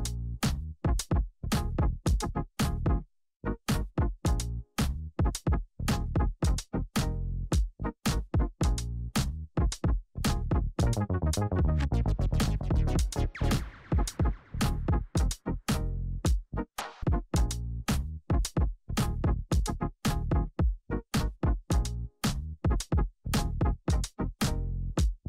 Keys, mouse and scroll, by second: 7.5 Return, 8.8-10.0 typing, 10.0 Return, 11.4 ctrl+d, 12.9-14.7 drag, 15.1 Return, 15.8-17.6 typing, 17.6 Return, 19.2 click, 23.8 Return, 24.7 click.